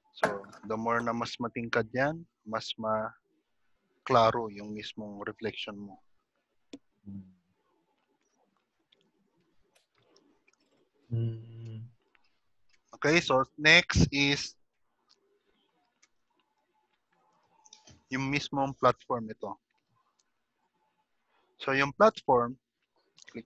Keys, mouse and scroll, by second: 0.5 click, 10.0-10.8 scroll down 10, 10.8 middle click, 11.3-12.1 scroll down 2, 12.1 middle click, 14.9-15.6 scroll up 6, 15.6-16.8 scroll down 3, 16.8 middle click, 16.8 scroll up 1, 22.0 scroll down 1.